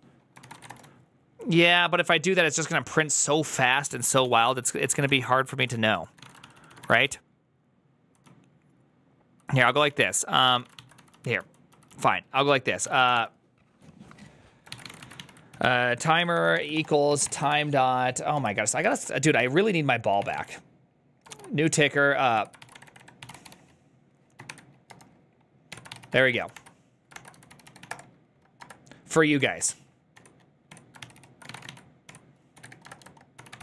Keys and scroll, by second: 0.5-1.9 typing, 3.8-21.2 typing, 21.2 ctrl+y, 22.2 Tab, 22.3-28.5 typing, 25.6 Tab, 29.2 Tab, 29.5 Return, 30.0 Tab, 30.5 Tab, 30.9 ctrl+c, 31.0 ctrl+c, 31.1-33.6 typing, 32.0 Tab.